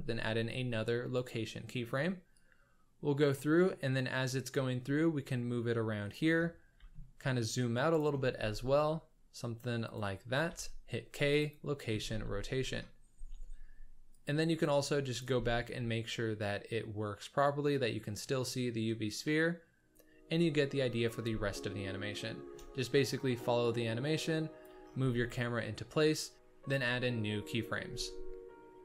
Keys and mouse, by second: 2.3-3.4 drag, 4.5 g, 6.7 g, 8.3 g, 10.4 k, 12.0 space, 13.1 space, 14.1 drag, 14.8 click, 15.4 space, 18.3 s, 22.2 shift+middle drag, 23.6-24.6 drag, 25.0 g.